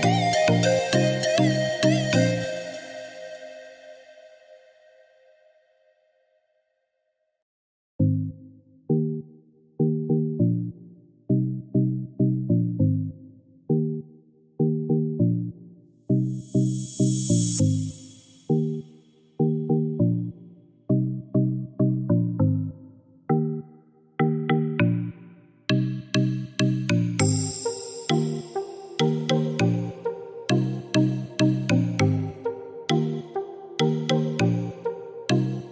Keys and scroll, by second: 30.0 3, 32.4 Return, 34.3 3, 34.4 Return.